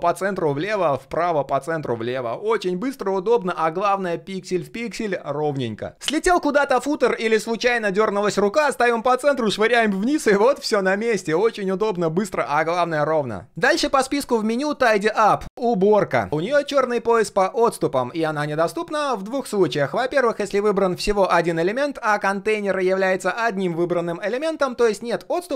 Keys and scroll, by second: 0.3 alt+a, 1.0 alt+d, 1.3 alt+h, 1.8 alt+a, 8.7 alt+h, 9.1 alt+s.